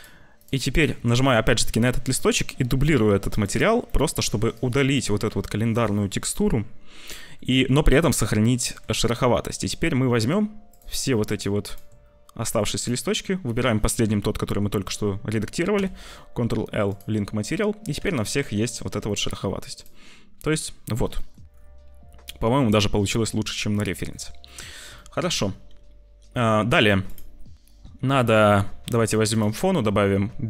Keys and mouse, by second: 1.9 click, 3.9 click, 4.5 click, 5.3 Delete, 7.1 middle click, 8.4 shift+middle click, 9.7 middle click, 10.6 middle click, 11.3 shift+click, 12.7 shift+click, 15.7 ctrl+l, 17.5 click, 17.9 `, 18.3 z, 19.0 shift+middle click, 19.3 middle click, 19.7 click, 21.2 shift+middle click, 25.0 shift+middle click, 29.2 click, 29.7 click.